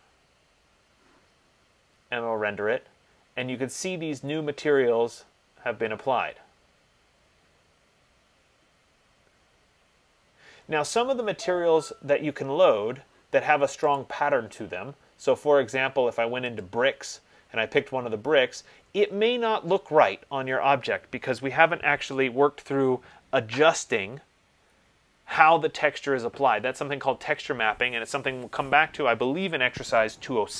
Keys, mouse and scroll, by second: 14.2 click, 16.8 click.